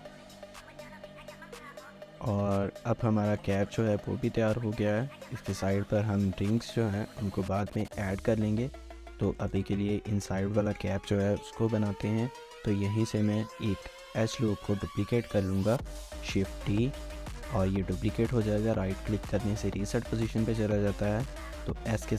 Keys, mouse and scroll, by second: 0.1 shift+middle click, 2.2 scroll down 1, 2.3 shift+middle click, 7.9 1, 8.5 scroll up 1, 8.6 1, 8.8 shift+middle click, 9.4 shift+middle click, 10.7 shift+middle click, 11.0 scroll up 1, 11.2-11.7 scroll, 11.7 Tab, 11.7 middle click, 12.4 scroll up 1, 13.0 alt+click, 13.7 alt+click, 13.8 shift+middle click, 15.2 1, 15.3 shift+middle click, 15.6 scroll up 1, 16.1 d, 16.7 right click, 19.8 shift+middle click, 20.3 scroll up 1, 21.1 typing.